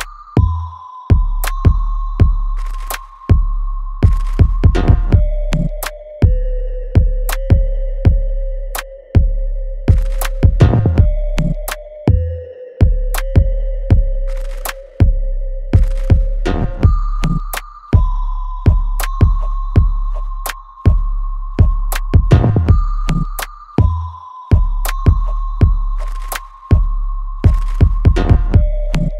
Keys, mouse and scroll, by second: 5.5 click, 5.8 alt+right click, 5.8-7.3 alt+right drag, 7.3-9.8 ctrl+drag, 9.8-12.9 ctrl+drag, 12.9 click, 16.5 right click, 17.9-21.7 drag, 22.5-22.9 scroll down 1, 22.9 click, 23.5 alt+right click, 24.5 click, 24.8 alt+click, 26.0 ctrl+s, 26.5 alt+click, 27.5 alt+right click.